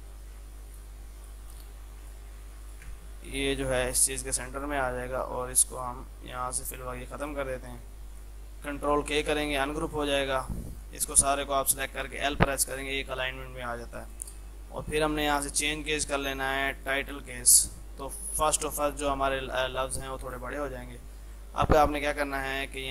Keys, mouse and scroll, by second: 3.0 c, 3.3 click, 4.2 shift+F2, 4.6 click, 6.6 right click, 7.3 click, 9.2 ctrl+k, 9.6-12.1 drag, 12.1 l, 14.0 click, 18.8 l, 20.3 click.